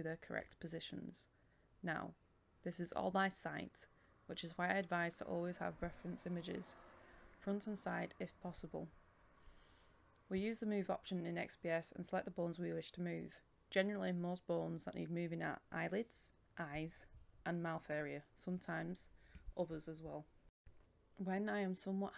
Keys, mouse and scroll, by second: 0.2-1.0 scroll up 1, 1.0 click, 1.6 scroll up 1, 1.7 click, 3.6 KP_1, 3.7 KP_Decimal, 4.1 click, 4.7 KP_1, 4.8 KP_5, 6.1 click, 6.5-6.9 scroll down 1, 6.9 click, 9.2 scroll up 1, 9.3 click, 10.2 KP_1, 10.6-11.3 scroll up 1, 11.3 click, 11.8 KP_1, 12.2 click, 15.8-16.2 scroll down 1, 17.4 click, 18.3 scroll down 1, 18.9 click, 19.1 BackSpace, 19.5 click, 19.6-19.9 scroll up 1, 19.9-21.5 drag, 21.5-22.1 scroll down 1.